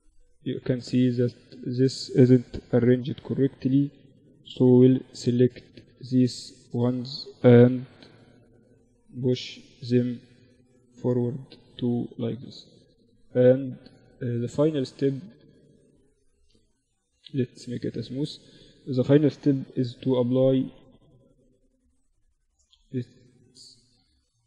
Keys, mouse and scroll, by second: 0.2-2.1 right drag, 1.5 g, 2.5 a, 2.8 right click, 3.7 g, 5.3 a, 5.7-7.6 right drag, 6.7 g, 8.1 a, 10.1 Tab, 11.4 Tab, 14.6 middle click, 15.0 Tab, 15.8 middle click, 15.8 t, 16.5-18.5 drag, 16.6 t, 18.5 KP_1, 19.1 ctrl+z, 21.3 middle click, 21.3 t, 22.3 click, 22.4 t, 23.9 click.